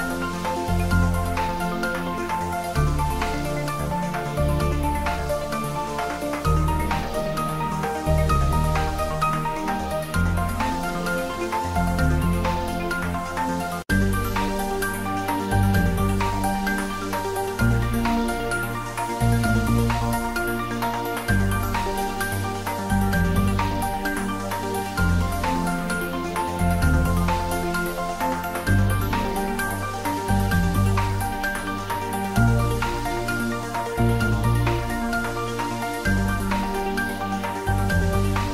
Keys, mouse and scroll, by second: 2.5 click, 3.4 Return, 4.5 middle click, 5.5 s, 5.8-7.9 middle drag, 8.2 click, 10.7 click, 12.1 ctrl+s, 12.5 shift+middle click, 13.5 ctrl+s, 17.5 click, 19.5 click, 21.3 click, 25.1 click, 25.9 ctrl+s, 26.6 click, 26.8-27.8 typing, 27.9-31.8 ctrl+middle drag, 31.8 s, 34.8 click, 35.2 ctrl+s, 36.7 ctrl+s.